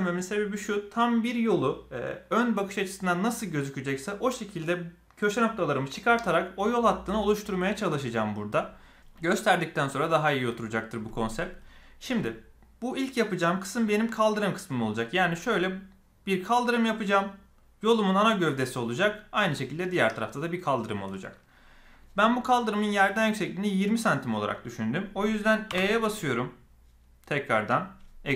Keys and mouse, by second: 25.7 e.